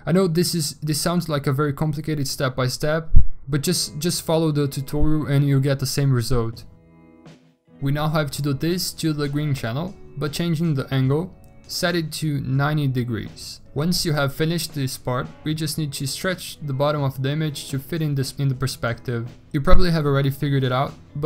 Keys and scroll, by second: 1.2 typing, 11.7-12.6 typing.